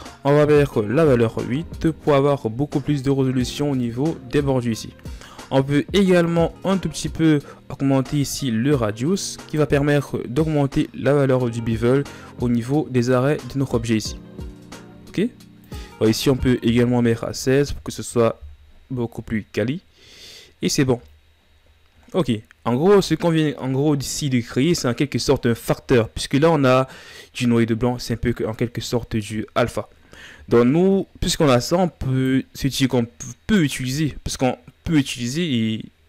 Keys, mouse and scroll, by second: 1.6-5.8 drag, 6.8-21.3 drag, 23.0-23.5 scroll down 10, 31.2-31.9 drag, 32.9 click.